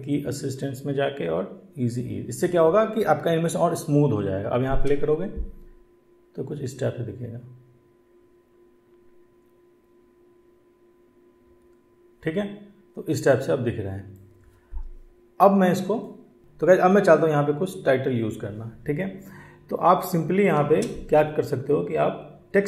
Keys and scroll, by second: 4.6 space, 16.4 space, 20.4 space.